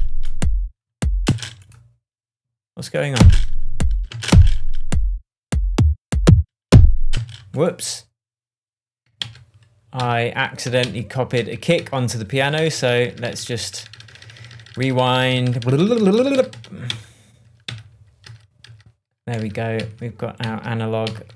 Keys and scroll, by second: 1.2 space, 3.1 space, 7.1 space, 9.2 super+z, 19.4 shift+super+z.